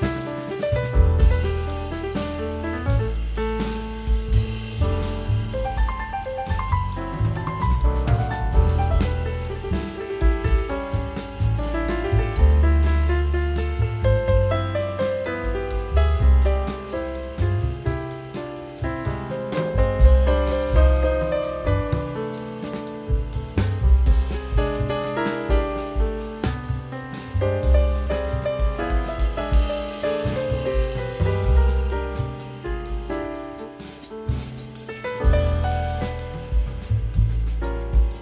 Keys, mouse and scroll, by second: 3.0 scroll up 1, 4.1 double click, 4.5 ctrl+a, 5.2 shift+F3, 10.5 double click, 10.8 ctrl+a, 11.9 shift+F3, 13.0 double click, 15.8-16.9 typing, 22.2 scroll down 1, 22.8 typing, 25.3-26.2 typing, 27.8 Return, 31.4-32.2 typing, 31.5 shift+click, 35.2 shift+click, 35.2-36.9 typing, 36.2 scroll up 1.